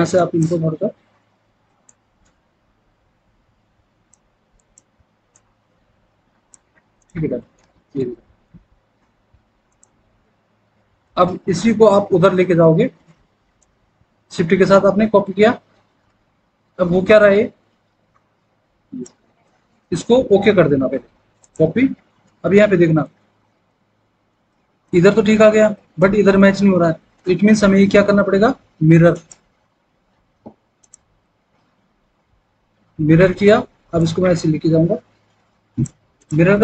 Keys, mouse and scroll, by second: 7.1 alt+w, 7.7 alt+w.